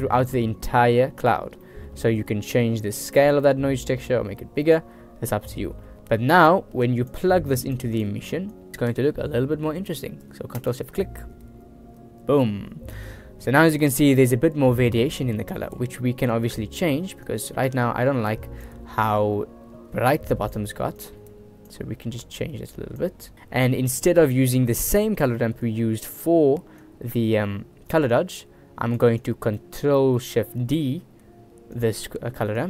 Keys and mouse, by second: 1.8 middle click, 3.3-4.9 drag, 5.9 middle click, 7.0 drag, 7.7 click, 15.6 middle click, 16.2 middle click, 17.4-18.8 drag, 19.3 click, 21.2 click, 22.4 click, 23.5 click, 24.5 click, 25.6 click, 25.6 right click, 27.0-29.2 drag, 29.4 click, 29.8 click, 30.8 ctrl+shift+d, 32.4 click.